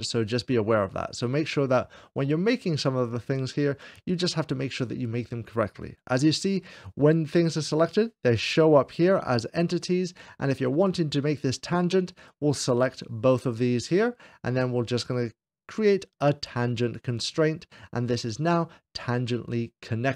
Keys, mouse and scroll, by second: 9.0 scroll down 2, 10.6-11.7 drag.